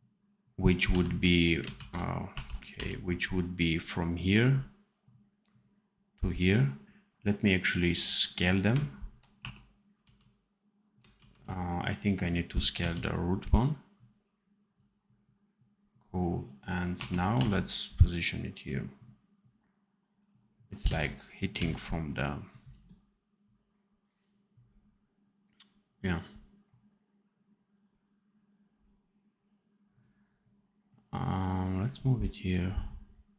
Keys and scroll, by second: 0.8 v, 1.7 ctrl+z, 2.2 1, 2.6 v, 9.3 1, 9.9 x, 11.1 ctrl+z, 12.7 x, 16.9 1, 17.3 v, 20.8 c, 21.5 v.